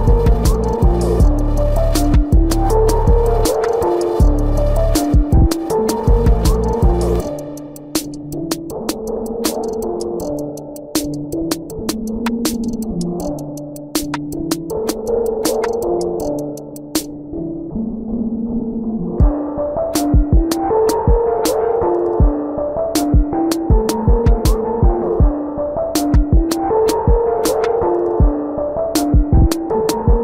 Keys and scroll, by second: 3.0 space, 3.6 ctrl+alt+z, 5.9 space, 7.9 ctrl+alt+z, 9.2 ctrl+alt+z, 10.5 space, 11.7 space, 15.1 space, 15.7 ctrl+alt+z, 19.9 space, 20.6 ctrl+alt+z, 21.8 space, 22.8 space, 23.6 space, 24.4 ctrl+=, 25.2 space, 26.0 space, 26.5 ], 26.6 ctrl+-, 26.7 ], 30.0-30.2 typing.